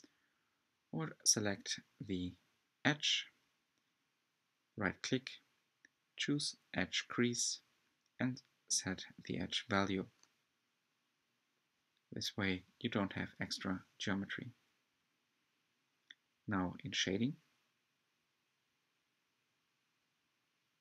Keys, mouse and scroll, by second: 0.0-1.7 typing, 0.8 Tab, 2.6 alt+click, 3.4-7.4 right drag, 7.4 Tab, 8.0-8.3 scroll down 1, 8.3 scroll up 1, 8.6 Tab, 9.5 alt+click, 10.6-13.0 right drag, 13.0 Tab, 13.5-13.9 scroll down 8, 13.9-20.8 middle drag.